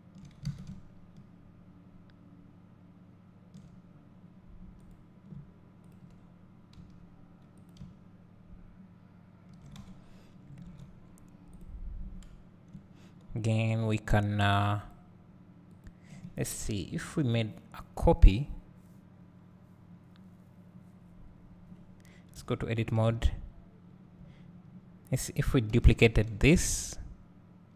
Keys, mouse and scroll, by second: 0.0-0.5 drag, 0.5 alt+a, 4.9 click, 6.8 s, 7.6-8.0 drag, 9.8 alt+a, 11.1-11.7 scroll up 1, 11.7 click, 12.8 `, 22.7 Tab, 23.1 a, 25.7 shift+d.